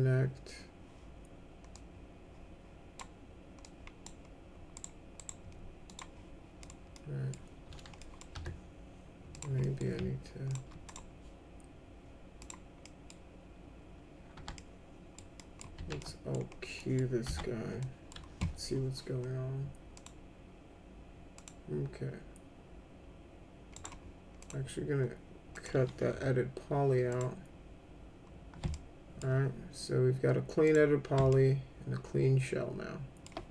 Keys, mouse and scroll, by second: 1.7-3.0 drag, 3.6 click, 4.7 right click, 5.2 right click, 5.9 click, 6.6 middle click, 6.9 middle click, 8.0 middle click, 8.4 1, 9.3 click, 9.6 middle click, 10.5 ctrl+click, 10.9 right click, 12.4 click, 12.9 middle click, 14.6 alt+middle click, 15.4 alt+middle click, 15.8 alt+q, 16.0-16.3 alt+middle drag, 16.8 middle click, 17.3 F3, 17.8 middle click, 20.0 click, 21.3 click, 23.7 right click, 24.4 click, 25.6 click, 26.1 e, 27.1 click, 28.7 alt+middle click, 30.7 click, 31.3-33.2 alt+middle drag.